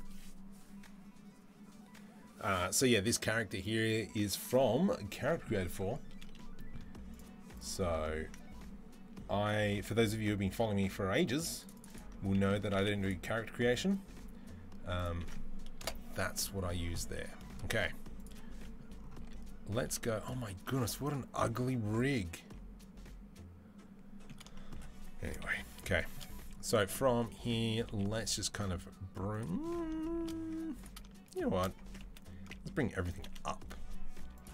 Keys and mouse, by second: 18.1-30.5 middle drag, 19.0 z, 19.6 z, 25.2 KP_3, 27.7 g, 30.5 click, 30.7 shift+middle click, 31.1 shift+click, 31.2-34.5 shift+middle drag, 31.6 Tab, 31.8 a, 32.9 g.